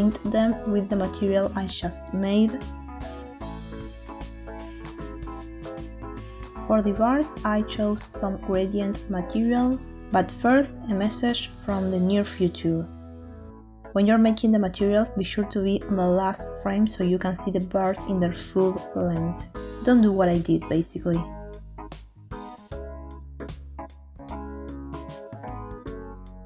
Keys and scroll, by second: 1.5 ctrl+l.